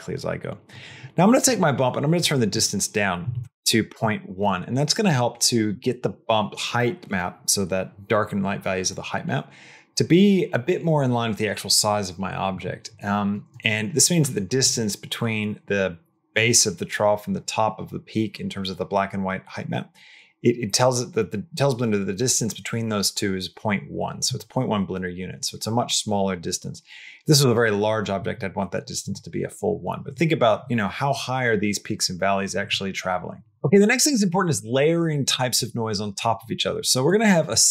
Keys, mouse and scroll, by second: 13.6 middle click, 14.0 middle click, 37.0 middle click, 37.3 click.